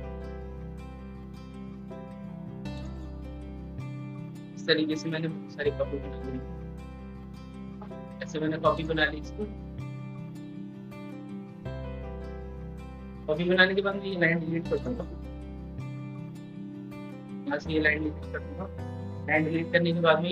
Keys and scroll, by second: 5.2 ctrl+d, 5.4 ctrl+d, 10.5 ctrl+d.